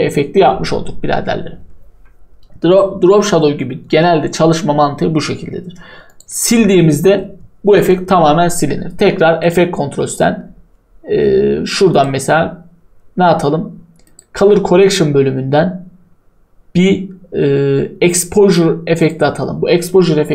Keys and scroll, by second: 6.3 Delete.